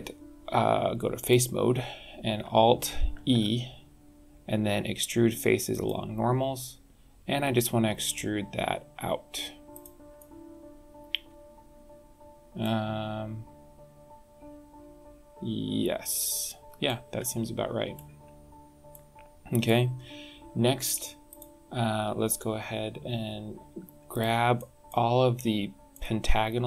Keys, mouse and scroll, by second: 1.2 click, 3.1 alt+e, 10.1 middle click, 16.8 middle click, 18.9 middle click, 21.3 click, 24.1 click, 24.5 middle click, 25.9 middle click.